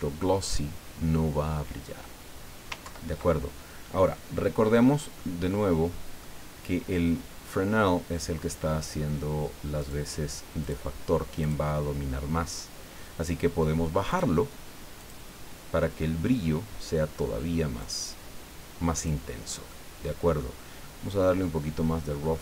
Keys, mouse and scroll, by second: 0.1-0.6 scroll down 1, 0.8-1.4 scroll down 2, 2.8 ctrl+Left, 5.2-6.4 drag, 9.8 click, 10.6 click, 11.4 click, 14.1 click, 14.9 click, 17.8 click, 19.0 click, 19.7 click.